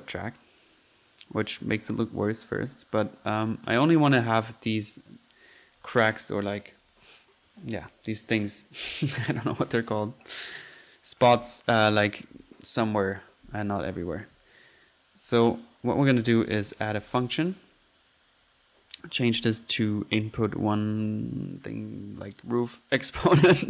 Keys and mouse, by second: 0.2 click, 1.3 click, 1.7 click, 1.9 drag, 2.6 click, 3.3 right click, 3.5 right click, 3.7 click, 4.1 click, 5.0 click, 13.1-13.9 typing, 14.7-15.3 right drag, 15.3 click, 15.4 right click, 15.8-16.9 typing, 17.7-18.0 drag, 18.1-18.5 drag, 19.3 drag, 23.5 click.